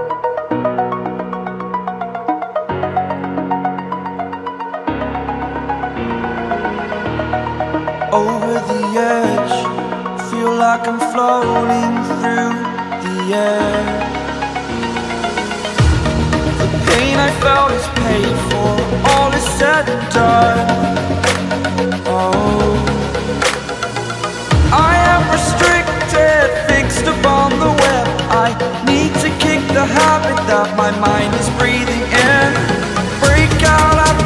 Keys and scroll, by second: 12.6 ctrl+space, 12.8 ctrl+space, 13.7 ctrl+space, 14.2 b, 14.6 ctrl+space, 14.8 ctrl+space, 15.0 x, 17.4 x, 20.2 z, 21.2 space, 21.9 ctrl+space, 22.5 space, 22.8 x, 24.6 3, 31.1 8, 32.4 1.